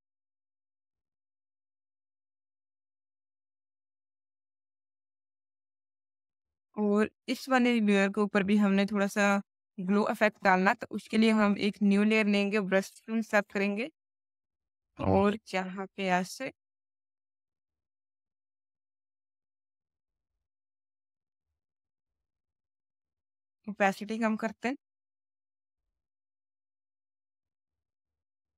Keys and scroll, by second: 12.4 b, 16.0 v, 16.6 ctrl+v, 28.2 b.